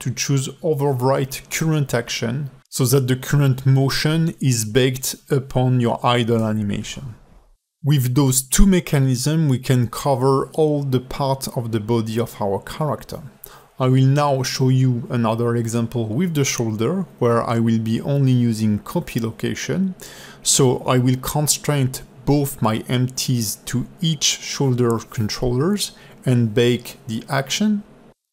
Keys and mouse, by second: 4.7 click, 5.3 space, 6.5 a, 7.0 KP_Decimal, 7.8 click, 8.0 middle click, 8.1 ctrl+Tab, 8.2 click, 8.7 click, 9.5 a, 9.5 x, 9.9-10.3 drag, 10.6 click, 11.4-12.4 drag, 12.7 alt+middle click, 13.6 click, 14.0 a, 14.1 x, 14.4 click, 15.2-18.2 drag, 18.4-19.5 drag, 19.7 middle click, 20.1 shift+click, 20.2 q, 22.7 click.